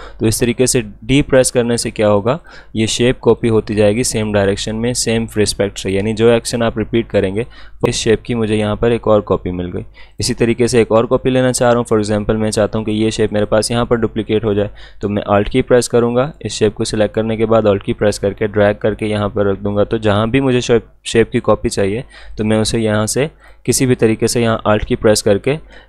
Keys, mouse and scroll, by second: 2.1-4.7 drag, 4.7 click, 10.1-15.1 alt+drag, 16.3-21.8 drag, 22.3 click.